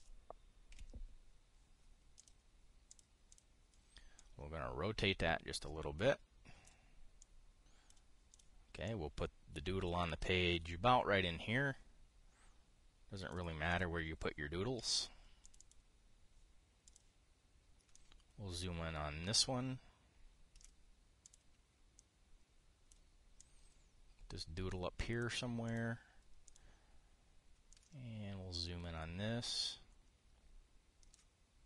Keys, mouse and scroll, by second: 1.4 KP_5, 2.9 drag, 3.6 click, 4.0 click, 4.9-7.5 drag, 7.9 click, 9.0 click, 9.5-14.1 drag, 14.4 click, 16.1 click, 17.6 click, 18.7-21.4 ctrl+drag, 21.9 click, 22.7-23.7 drag, 24.1-26.0 drag, 26.4 click, 27.2-28.3 drag.